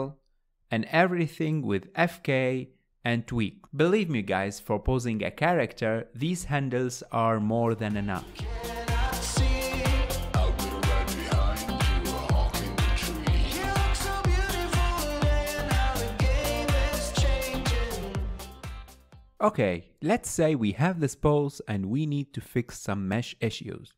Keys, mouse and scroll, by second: 1.1 click, 2.0 click, 3.6 click, 4.4 click, 5.8 click, 6.4 click, 7.0 click, 7.5 drag, 8.3 scroll down 2, 8.3 middle click, 8.6 scroll up 3, 8.7 shift+middle drag, 8.9 click, 8.9 middle click, 9.1-13.4 typing, 9.8 click, 10.2 click, 11.0 middle click, 11.6 click, 11.7 middle click, 12.3 middle click, 12.5 middle click, 13.4 middle click, 13.8 middle click, 13.9 click, 14.3 shift+middle click, 14.3 click, 14.6 scroll down 3, 14.6 shift+middle click, 15.1 scroll up 4, 15.2 middle click, 15.3 click, 15.3 middle click, 15.5 r, 15.8 middle click, 15.9 scroll down 1, 16.0-16.5 shift+middle drag, 16.5-16.9 scroll down 1, 17.1 middle click, 17.2 a, 17.3 KP_Decimal, 17.4 click, 17.5-18.5 middle drag, 17.7 scroll up 3, 17.8 click, 18.1 h, 18.8-19.2 scroll up 4, 18.8 shift+middle drag, 19.4-21.7 shift+middle drag, 21.7 click, 22.3-23.7 middle drag, 23.7 scroll down 1, 23.8 middle click.